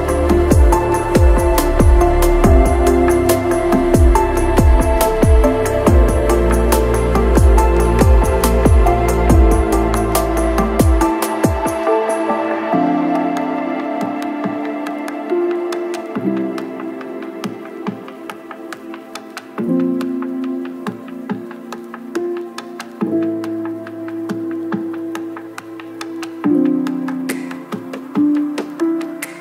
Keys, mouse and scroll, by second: 0.5 middle click, 0.7 shift+middle click, 0.9 middle click, 1.1 shift+middle click, 1.4 shift+click, 1.5 ctrl+shift+z, 1.6 click, 1.7 middle click, 2.0 shift+middle click, 3.1 shift+middle click, 3.3 middle click, 3.6 click, 3.7 shift+click, 4.0 middle click, 4.3 shift+click, 4.4 middle click, 4.6 middle click, 4.7 shift+d, 5.0 p, 5.1 Tab, 6.0 click, 6.7 click, 7.0 click, 7.7 middle click, 8.0 Tab, 8.2 alt+a, 8.9 Tab, 9.0 middle click, 9.2 s, 9.2 Tab, 9.3 ctrl+l, 9.5 middle click, 9.8 ctrl+l, 10.0 middle click, 10.8 ctrl+middle click, 11.3 a, 12.5 ctrl+l, 12.7 click, 14.2 right click, 14.7 click, 15.0 ctrl+l, 15.0 click, 15.1 click, 15.6 ctrl+middle click, 15.8 shift+KP_0, 16.1 Tab, 16.6 click, 16.9 ctrl+middle click, 17.2 middle click, 18.1 click, 18.4 KP_Divide, 18.5 middle click, 18.6 KP_Divide, 19.5 click, 20.1-21.7 drag, 22.8 click, 23.4 ctrl+middle click, 24.0 click, 26.3 middle click, 26.7 middle click, 27.2 middle click, 27.4 Tab, 27.8 Tab, 27.9 click, 28.5 Tab, 28.7 middle click, 29.2 Tab, 29.2 middle click.